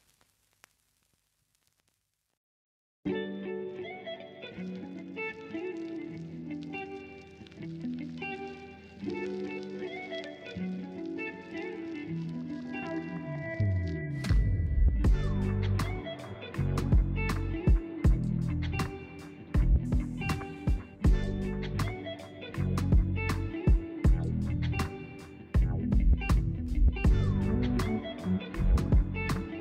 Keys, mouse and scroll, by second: 0.4 s, 1.0 Tab, 1.2-4.5 middle drag, 4.5 Tab, 5.7 click, 6.1-6.7 scroll up 1, 6.9 alt+click, 7.6 alt+shift+click, 8.0 alt+shift+click, 8.8 KP_1, 9.4-9.9 scroll up 1, 9.9 g, 12.9 z, 12.9 z, 13.0 z, 13.7 Tab, 14.4 s, 15.9 s, 16.0 s, 16.2 Tab, 17.1 click, 17.5 alt+click, 17.9 g, 19.8 z, 20.4-21.8 middle drag, 21.8 click, 23.2-25.0 typing, 26.7-29.6 typing.